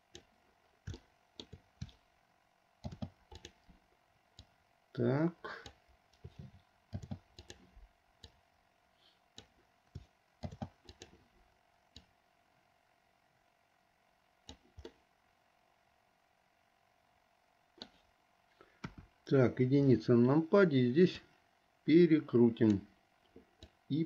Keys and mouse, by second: 1.2 shift+middle click, 3.0 shift+d, 4.7-6.3 drag, 7.0 shift+d, 8.3-9.6 drag, 10.5 shift+d, 12.0-14.7 drag, 15.0-18.1 middle drag, 18.9 KP_1, 21.4-23.0 drag, 23.7-24.0 drag.